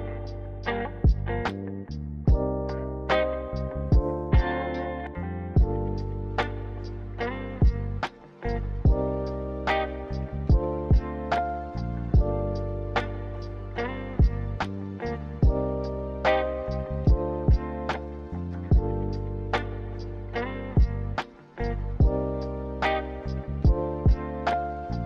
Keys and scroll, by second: 1.4-2.4 typing, 8.8 ctrl+c, 9.1 ctrl+v, 19.5 z, 23.9 Delete.